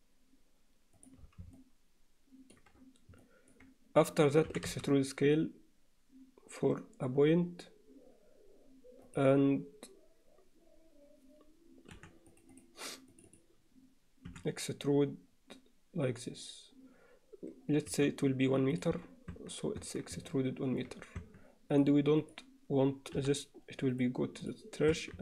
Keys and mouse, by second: 1.6-2.6 middle drag, 3.2 middle click, 4.5 e, 12.0 3, 12.6 click, 13.1 click, 14.3 e, 19.4 Tab, 19.8 Tab, 20.3 alt+middle click, 21.2 Tab, 22.2 click, 23.2 m, 24.4 click, 25.0 Tab.